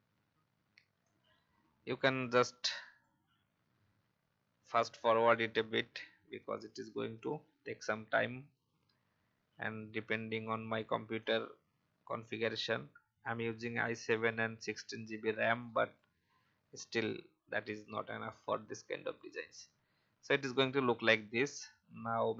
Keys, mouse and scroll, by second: 11.2-22.3 drag.